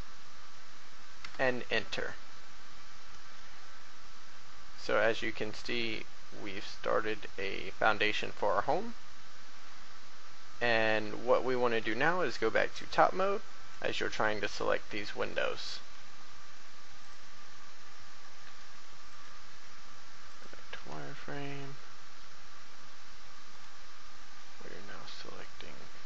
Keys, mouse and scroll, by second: 3.3 middle click, 9.8 middle click, 11.8 7, 13.0 shift+middle click, 14.5 shift+right click, 16.0 scroll down 1, 17.0 click, 21.1 shift+middle click, 23.4 shift+right click, 24.3 middle click.